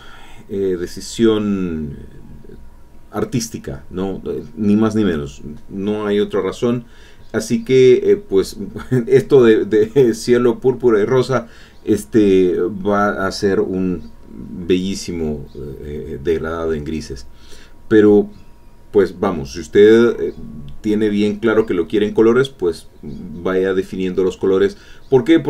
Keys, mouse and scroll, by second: 0.6 alt+Tab, 8.3 alt+Tab, 12.9-18.8 drag.